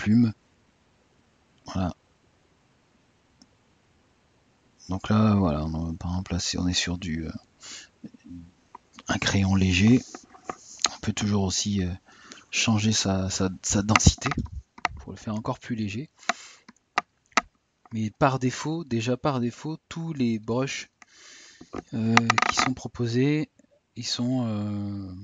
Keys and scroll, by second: 21.8 typing.